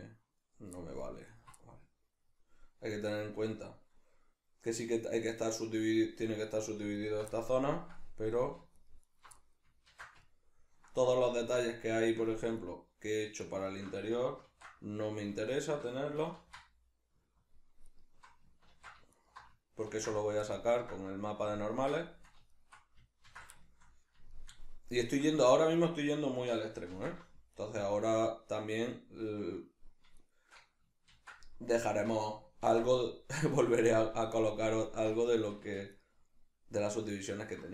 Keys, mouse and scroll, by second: 1.3 alt+right click, 1.6-7.0 middle drag, 7.0 alt+right click, 7.3-8.8 middle drag, 8.8 alt+shift+right click, 9.0 alt+shift+right click, 9.4-11.2 middle drag, 9.9 ctrl+x, 11.2 alt+right click, 11.6-12.6 middle drag, 12.6 alt+right click, 13.4 alt+shift+right click, 14.4 ctrl+x, 15.6 alt+right click, 16.4 ctrl+x, 17.8 alt+right click, 18.7 ctrl+x, 19.1 alt+right click, 19.9 ctrl+x, 20.5-22.5 ctrl+middle drag, 22.5 alt+right click, 23.2 ctrl+x, 23.6-25.6 shift+middle drag, 25.6 alt+right click, 26.9 ctrl+x, 27.5 alt+right click, 30.2 alt+shift+right click, 31.1 ctrl+x, 31.8 alt+right click, 32.6 ctrl+x, 32.8-34.2 middle drag, 34.2 alt+right click, 35.2 shift+middle click, 35.9 alt+shift+right click.